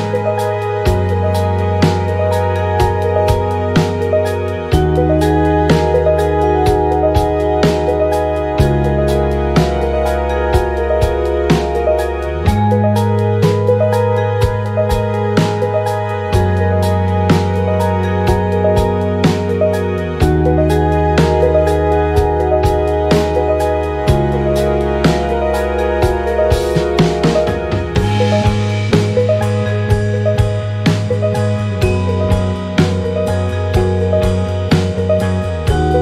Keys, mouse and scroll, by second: 0.2 click, 1.4 ctrl+click, 2.6 ctrl+d, 3.2-5.4 drag, 5.6 ctrl+click, 6.6 ctrl+d, 7.6-10.4 drag, 10.7-12.2 ctrl+drag, 13.3 click, 14.1 click, 15.4 ctrl+d, 16.3 ctrl+d, 17.1 ctrl+d, 18.1 ctrl+d, 19.9 shift+click, 22.2 click, 22.7 shift+click, 23.6 ctrl+shift+KP_Multiply, 24.9 click, 25.4 shift+click, 26.3 ctrl+KP_Multiply, 27.5 click, 28.0 shift+click, 31.3 shift+click, 33.0 ctrl+g, 34.8 click.